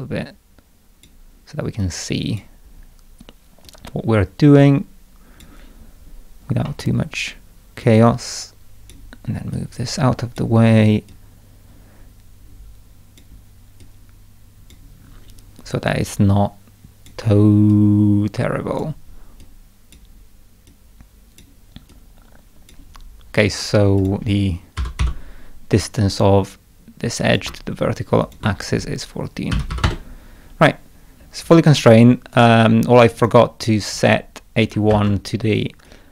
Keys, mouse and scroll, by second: 1.8 click, 3.7-5.4 drag, 6.7 middle click, 7.8-8.9 drag, 9.6-10.4 drag, 11.1-13.2 drag, 13.8-14.7 drag, 16.1-17.1 drag, 17.7-18.8 drag, 19.4-20.0 drag, 20.7-21.4 drag, 21.9-22.7 drag, 24.0 click, 24.6-25.5 typing, 25.2-25.9 scroll up 4, 27.3 click, 28.2 ctrl+click, 30.9 scroll down 2, 31.2 middle click, 32.4 right click, 33.1 click, 33.2 click, 34.6 click, 34.9 shift+a, 35.9 click.